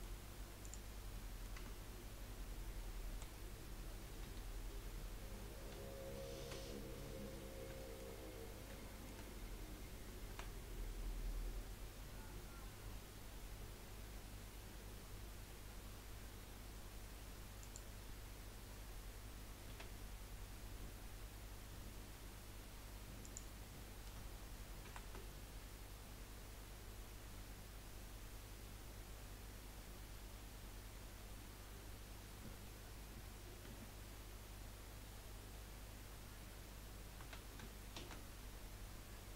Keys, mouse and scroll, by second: 0.0 middle click, 0.6 click, 1.1 middle click, 1.5 Tab, 3.1 KP_1, 4.2 KP_3, 5.7 z, 7.0-7.8 scroll up 2, 7.8 shift+middle click, 8.2-8.5 scroll up 1, 8.8-10.3 shift+middle drag, 10.3 e, 19.7 s, 24.8 ctrl+r, 37.2 s.